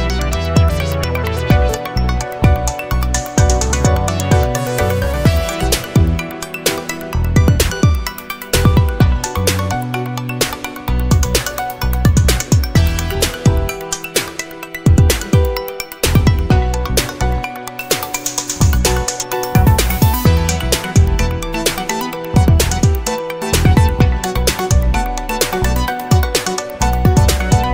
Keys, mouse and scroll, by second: 0.2 click, 2.6 0, 3.7 1, 4.4 scroll down 2, 5.3 0, 6.4-6.8 scroll up 4, 6.9-7.2 scroll down 2, 7.4-7.9 scroll up 2, 9.8 click, 10.6 click, 12.1 click, 14.0 click, 16.1 click, 16.8 click, 18.8 Escape, 20.4 Escape, 22.2 click, 24.8 click, 25.4 click.